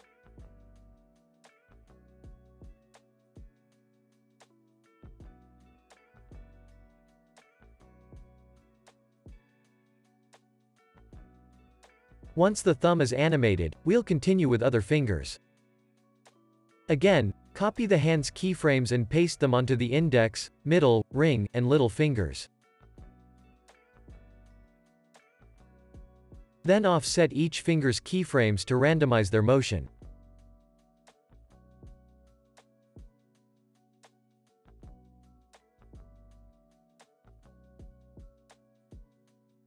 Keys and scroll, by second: 0.6 space, 2.5 space, 4.9 space, 5.1 super+s, 6.4 space, 8.0 space, 8.3 super+s, 13.0 super+s, 17.2 u, 18.1 super+c, 29.9 alt+w, 31.4 alt+w, 32.7 alt+w, 34.0 alt+w, 35.1 alt+w, 35.5 super+s, 36.5 space, 38.4 space, 38.6 super+s.